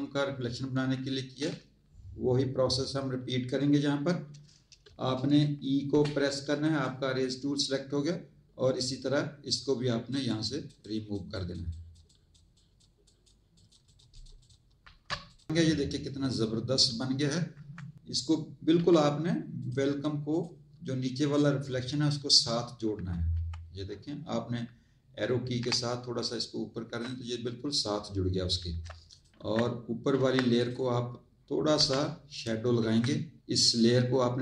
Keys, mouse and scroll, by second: 5.9 e, 9.4 click, 11.7 click, 12.0 click, 12.5 click, 14.1 click, 14.8 z, 15.3 alt+click, 17.5 z, 17.9 click, 18.7 v, 19.5 click, 20.3 click, 21.1 click, 22.9 Up, 25.6 Up, 28.5 z, 29.1 alt+click, 29.3 z, 30.3 z, 30.5 click, 32.3 click, 32.7 Tab.